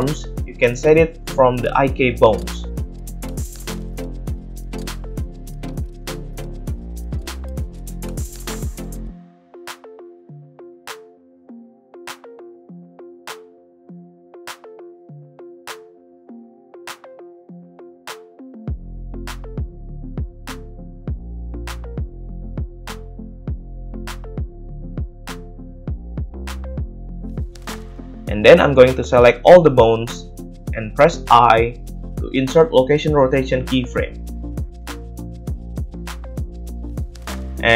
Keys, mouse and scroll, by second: 0.6-3.1 middle drag, 1.5 g, 3.1 drag, 3.2-3.5 middle drag, 3.5 click, 3.6-5.0 middle drag, 5.0-8.1 drag, 8.1-9.4 shift+middle drag, 8.4 click, 8.6 click, 9.4 click, 9.6-10.7 middle drag, 10.7-17.3 drag, 12.1 middle click, 12.1 right click, 12.8 ctrl+z, 13.3 ctrl+z, 15.4 right click, 16.9 g, 17.5-19.3 drag, 19.3-20.9 middle drag, 20.9-25.7 drag, 21.0 g, 23.9 g, 25.7-28.2 middle drag, 28.5 a, 31.4 i, 35.0 a, 35.3 a, 35.9-36.3 middle drag, 36.3-37.7 drag.